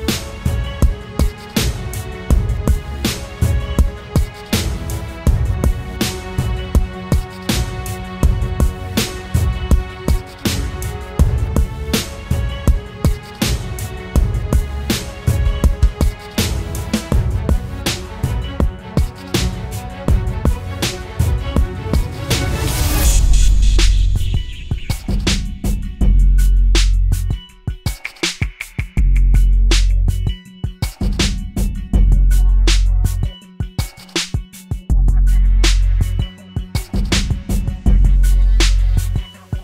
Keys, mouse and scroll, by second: 22.8 alt+click, 24.5-25.3 typing.